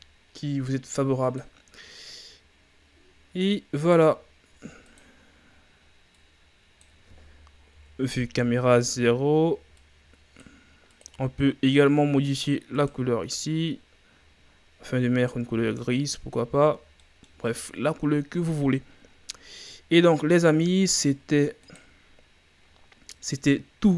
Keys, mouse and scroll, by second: 1.4-2.7 drag, 2.7 scroll down 2, 3.4 scroll up 2, 3.8-5.0 right drag, 5.0-7.8 drag, 7.8 KP_0, 8.7-9.7 scroll up 3, 9.8-12.7 drag, 15.6 a, 15.9-16.2 scroll down 4, 19.1 scroll up 7, 19.9-20.3 scroll down 2, 21.8 click, 22.6-23.3 scroll down 3, 23.3 scroll up 2.